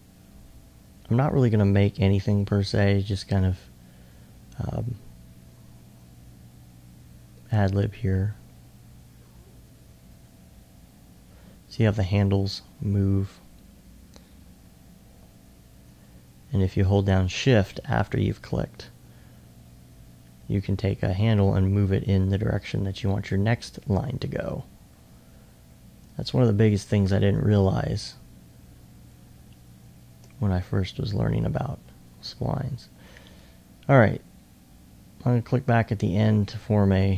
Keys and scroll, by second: 25.7-26.9 typing.